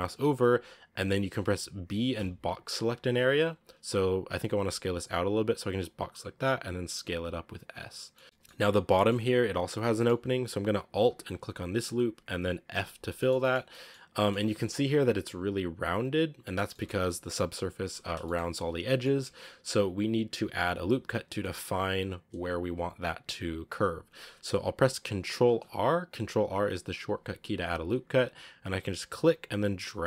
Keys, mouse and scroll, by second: 0.2 scroll down 2, 0.8 a, 1.8 b, 3.5 shift+scroll down 1, 4.2 b, 6.2 s, 8.0-9.1 middle drag, 9.1-9.8 scroll up 1, 9.8 middle click, 10.4-11.3 scroll up 1, 11.3 alt+right click, 12.6 f, 12.9 scroll down 1, 13.0-14.3 shift+middle drag, 14.3-16.6 scroll up 1, 16.6-19.1 shift+middle drag, 19.1 Tab, 21.0-21.3 scroll up 1, 21.3-24.3 middle drag, 25.3 ctrl+r.